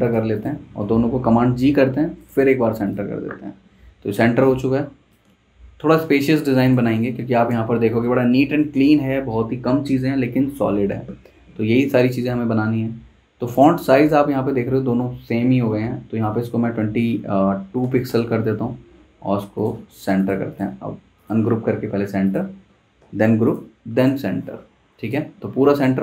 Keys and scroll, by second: 1.4 super+g, 17.6 typing, 18.0 Return, 23.0 super+g.